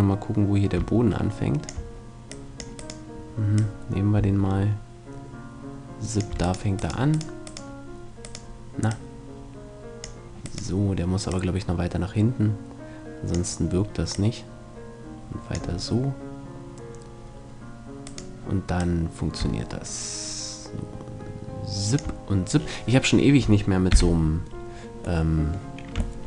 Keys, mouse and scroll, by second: 2.3-5.3 drag, 2.8-4.7 right drag, 6.5-10.1 right drag, 8.9-10.9 drag, 10.5-12.3 right drag, 11.3-13.0 drag, 14.1-15.9 drag, 18.1-19.8 right drag, 18.8-20.5 drag, 22.6-26.2 middle drag, 23.9 KP_5.